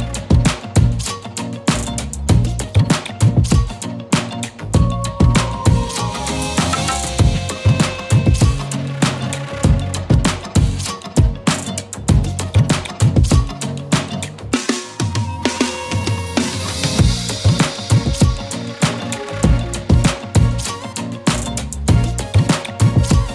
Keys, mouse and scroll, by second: 2.6 z, 2.8 click, 3.0-3.5 z, 9.3-12.6 typing, 9.6 click, 10.3 click, 10.8 click, 11.2 click, 12.0 click, 12.3 click, 13.6 click.